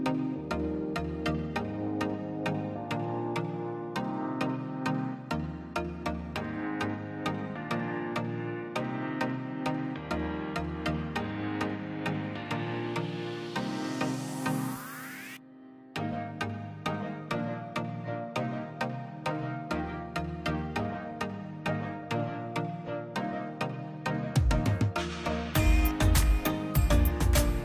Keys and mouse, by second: 0.1 click, 3.6 middle click, 3.9-5.1 drag, 5.3-6.3 drag, 6.4-6.8 drag, 9.3-10.1 drag, 10.8 click, 12.8 middle click, 12.9 click, 13.3 shift+a, 17.1 ctrl+shift+click, 18.1 drag, 20.0-21.5 drag, 23.2 middle click, 23.6 middle click, 24.3 click, 26.0 click, 26.1 shift+a.